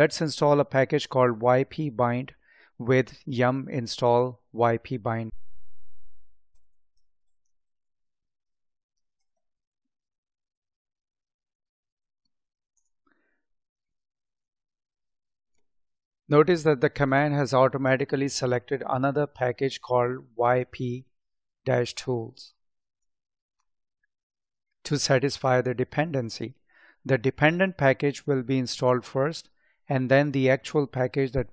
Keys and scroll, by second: 7.1 space, 8.2 space.